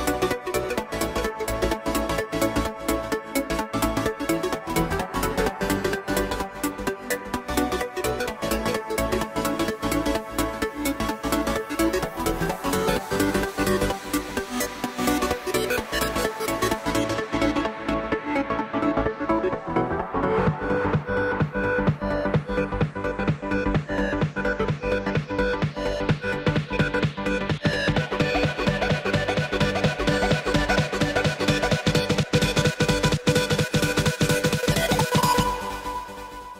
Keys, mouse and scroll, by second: 2.3 ctrl+r, 7.6 ctrl+r, 12.9 click, 13.3 click, 13.9-15.3 middle drag, 15.3 click, 17.0 click, 19.1 ctrl+z, 20.0 e, 28.6 Tab, 29.7 KP_1, 30.5 scroll down 4, 31.8 shift+d, 34.3 r.